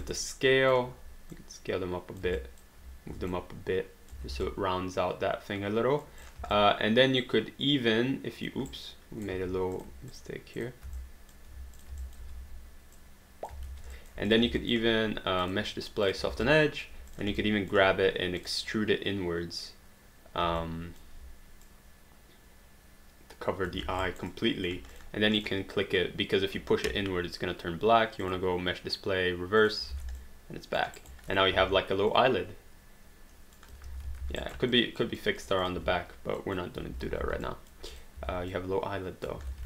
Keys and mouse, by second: 0.1 alt+click, 1.3 click, 2.4 alt+click, 3.1 w, 3.3 click, 4.3 alt+d, 4.5 alt+click, 6.2 click, 6.5 alt+click, 8.7 right click, 9.3 q, 9.8 click, 10.1 shift+click, 11.0 alt+click, 11.8 shift+click, 12.0-13.0 typing, 12.0 alt+click, 13.0 click, 13.7 alt+d, 13.9 alt+click, 14.4 click, 14.6 alt+click, 16.4 alt+click, 17.5 alt+click, 20.7 alt+click, 21.6 click, 23.7 alt+click, 23.8 alt+d, 24.1 alt+right click, 24.3 alt+click, 28.2 click, 29.7 click, 29.9 alt+d, 30.2 alt+click, 31.1 alt+right click, 31.3 click, 31.6 e, 32.1 click, 33.9 ctrl+z, 34.2 alt+d, 34.4 alt+right click, 34.7 alt+click, 35.8 w, 36.4 click, 37.2 alt+d, 37.6 alt+click, 38.2 e, 38.5 click, 39.4 ctrl+z.